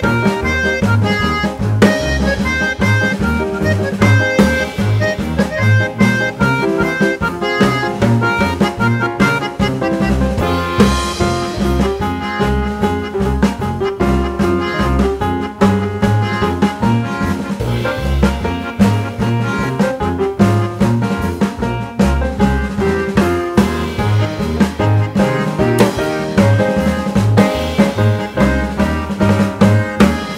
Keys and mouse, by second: 0.9 click, 2.4 click, 3.7 click, 7.5 click, 8.9 click, 13.8 click, 14.1 click, 15.0-16.3 drag, 17.7 click, 18.2 click, 19.8 click, 20.6 click, 20.6 right click, 21.4 click, 23.1 click, 26.7 click, 29.8 ctrl+c.